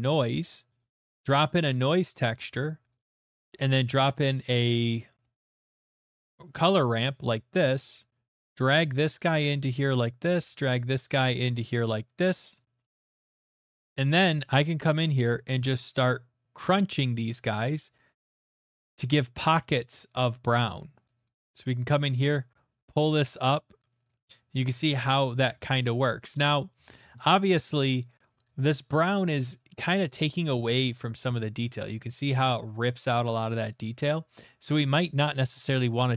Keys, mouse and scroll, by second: 0.9 Return, 2.7 click, 3.0 click, 3.3 click, 3.3-6.7 typing, 9.4 click, 12.0 click, 12.7 middle click, 13.5 middle click, 14.2 middle click, 15.8 click, 20.4 click, 21.2 click, 24.3 click, 24.8-26.0 scroll, 25.6 middle click, 26.3 shift+middle click, 27.1 middle click, 27.4 middle click, 27.4 middle click, 27.9 middle click, 28.2 middle click, 30.2 middle click, 30.8 middle click, 34.0 click, 34.6 middle click, 35.9 click.